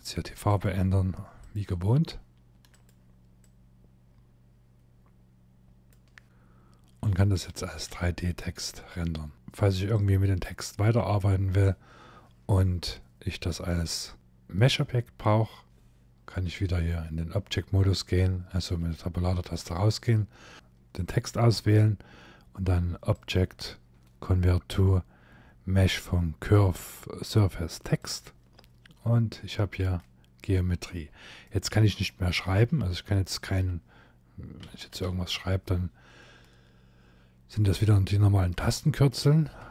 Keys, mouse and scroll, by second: 2.4 click, 7.6 F12, 8.7-9.3 scroll down 3, 9.6 click, 18.2 Tab, 19.1 Tab, 20.5 click, 28.3 Tab, 28.7-29.4 scroll up 8, 29.6 middle click, 30.7-31.1 scroll down 4, 31.1 middle click, 32.2 scroll down 2, 32.8 shift+middle click, 34.3-34.8 typing, 38.1 middle click, 39.0 scroll down 1, 39.3 shift+middle click.